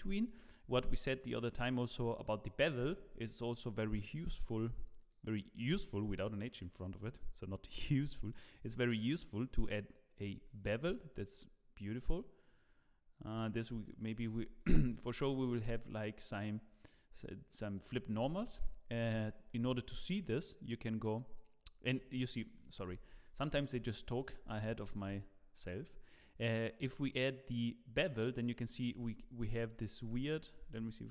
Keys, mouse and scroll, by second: 0.3-0.7 scroll down 3, 0.8 shift+middle click, 1.7 middle click, 1.9 scroll down 1, 3.3 middle click, 5.0 click, 5.7 click, 10.1-10.5 scroll down 2, 10.4 middle click, 11.3 shift+click, 13.6 middle click, 14.2 scroll up 3, 14.6 shift+middle click, 15.4 middle click, 18.6-19.1 scroll down 6, 19.2 shift+middle click, 19.7 middle click, 21.9 scroll up 5, 22.3 middle click, 22.8 scroll up 3, 23.2 shift+middle click, 24.1 middle click, 25.6 click, 28.9-29.5 scroll down 9, 29.7 middle click, 30.3 shift+middle click, 30.7-31.1 scroll down 3.